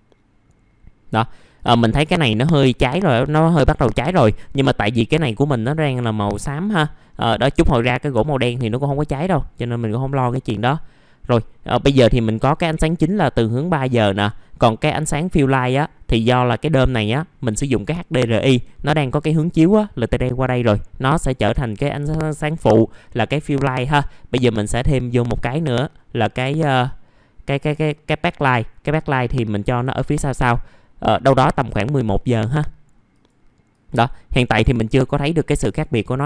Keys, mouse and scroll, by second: 0.7 KP_2, 3.6 click, 4.1 scroll up 1, 5.4 scroll down 1, 9.2 scroll up 1, 10.7-11.1 scroll down 1, 14.9-16.5 drag.